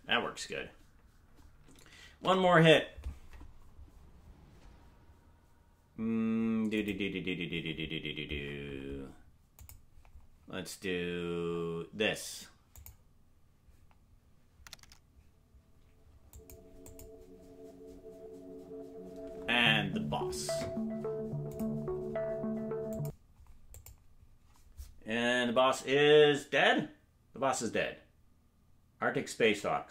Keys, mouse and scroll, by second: 0.1 space, 0.5 space, 0.7 space, 4.8 ctrl+s.